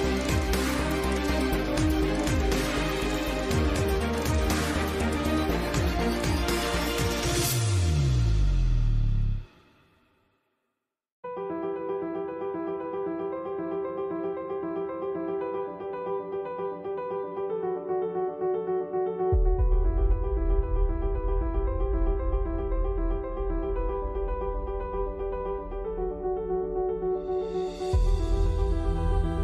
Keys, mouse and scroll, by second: 0.3 Tab, 0.7 ctrl+s, 1.0 n, 1.8 Tab, 2.1-4.1 typing, 5.3 g, 7.3 click, 7.5 s, 9.6 s, 10.5-11.7 drag, 11.0 s, 12.2 s, 13.7 s, 14.2 s, 16.3 Tab, 16.8 ctrl+s, 17.4 Tab, 17.6 a, 18.5 click, 19.0 click, 19.3 ctrl+z, 20.1 click, 20.3 n, 21.2 Tab, 21.9 n, 24.5 Tab, 24.9 click, 25.4 b, 25.7 v, 26.1 n, 28.3 Tab, 28.4 Tab.